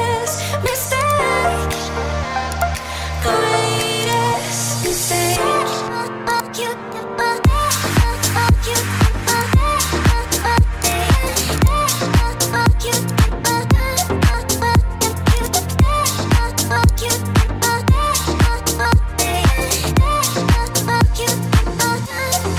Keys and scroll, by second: 4.3 1, 7.2 5, 11.8 5, 14.0 2.